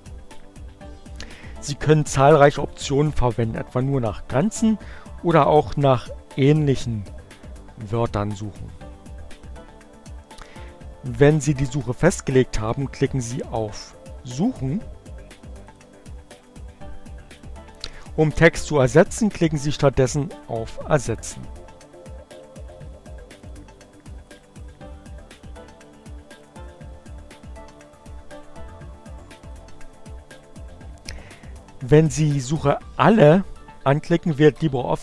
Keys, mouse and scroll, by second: 7.5 click, 15.1 click, 21.2-22.7 drag, 23.2-24.4 drag, 25.9 click, 27.5 click, 28.9 click.